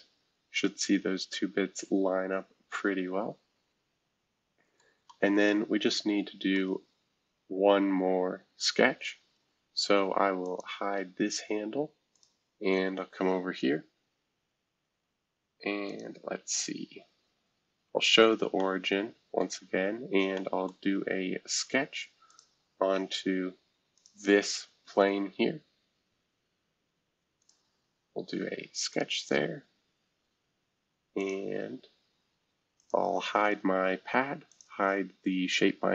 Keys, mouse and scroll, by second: 6.6-9.0 middle drag, 6.9-8.2 scroll down 1, 8.2-9.0 scroll down 1, 10.4 click, 12.1 click, 13.2 scroll down 1, 15.9 click, 16.5 click, 17.4 scroll down 2, 18.6-19.9 middle drag, 19.9 scroll down 1, 20.3-21.5 middle drag, 20.8 scroll down 1, 21.5 scroll down 2, 22.3-23.9 drag, 23.9 click, 24.5-26.5 scroll down 2, 27.4 click, 28.9 click, 31.1 click, 32.0 scroll down 2, 32.8 click, 34.5 click.